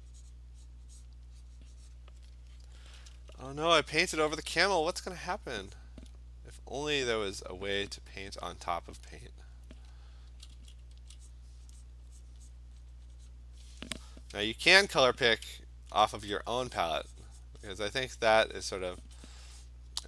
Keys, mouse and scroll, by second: 0.0 click, 0.4 click, 1.1 click, 2.0 click, 4.0 [, 4.2 [, 4.3 [, 4.5 [, 4.9 click, 5.2 click, 5.8 click, 7.3 click, 8.7 click, 9.7 click, 10.3 [, 10.6 [, 10.9 [, 11.3 click, 11.7 click, 11.9 click, 12.2 click, 12.5 click, 12.8 click, 13.0 click, 13.1 click, 13.3 click, 16.1 alt+click, 16.8 click, 17.5 click, 17.8 click, 18.0 click, 18.8 click, 19.1 click, 19.4 click, 19.5 click, 19.7 click.